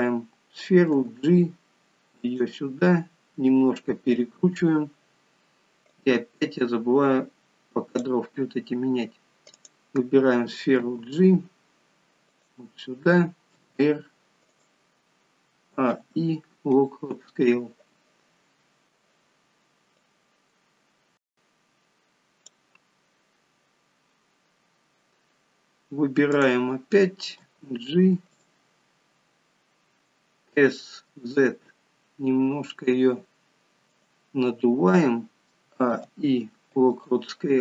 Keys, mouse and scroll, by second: 1.0 g, 6.1 click, 9.7 click, 10.9 g, 15.7 a, 20.3 click, 23.4 scroll down 4, 24.4 scroll down 2, 26.2 click, 27.3 g, 35.5 a.